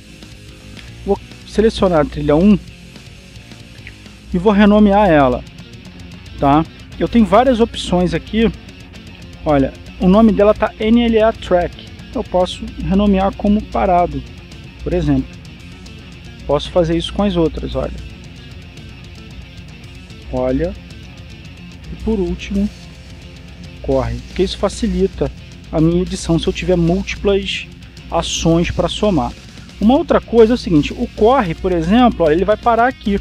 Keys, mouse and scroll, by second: 2.1 right click, 2.8 right click, 4.1 right click, 6.1 click, 8.6 click, 9.3 click, 12.9 click, 14.6-16.1 typing, 16.2 Return, 18.8 right click, 19.6 click, 20.6-21.8 typing, 22.1 Return, 23.5 right click, 24.3 click, 25.7-27.1 typing, 27.3 Return, 32.3-33.2 drag.